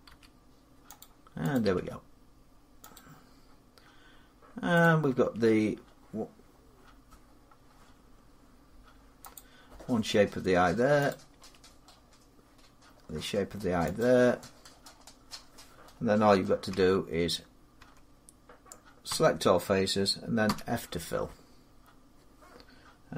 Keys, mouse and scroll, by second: 0.8 click, 1.5 click, 1.5 g, 2.8 click, 5.0 click, 5.1 g, 6.7-7.1 scroll up 3, 7.1-7.8 scroll down 8, 7.8 scroll, 9.2 click, 10.9 click, 11.2 g, 13.8 click, 14.5-15.9 scroll, 16.5 Tab, 16.5 middle click, 17.6 Tab, 18.9 a, 20.3 f.